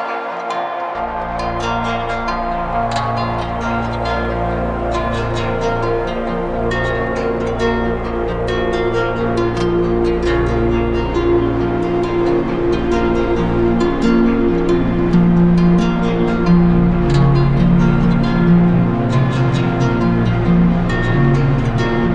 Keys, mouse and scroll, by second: 2.5 alt+click, 3.8 right click, 6.2 click, 7.2 click, 7.6 ctrl+z, 9.1 click, 9.7 click, 10.2 click, 11.5 click, 12.0 click, 12.5 click, 13.0 click, 13.4 click, 13.9 click, 15.7 shift+click, 16.7 shift+click, 17.2 click, 19.8 click, 21.2 click.